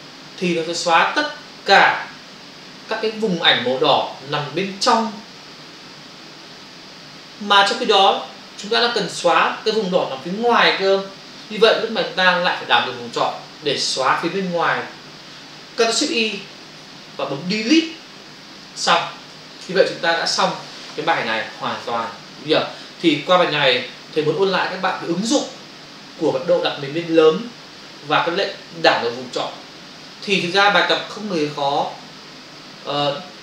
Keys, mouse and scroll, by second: 18.1 Delete.